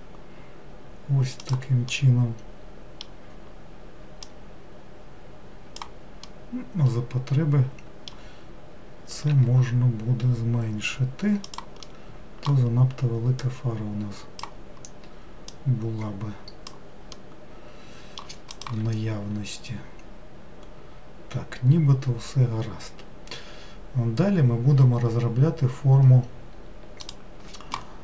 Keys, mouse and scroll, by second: 2.0-4.3 middle drag, 4.3 click, 6.3-9.3 middle drag, 9.3 s, 11.9-13.4 middle drag, 13.4 click, 15.5 click, 17.2-20.2 middle drag.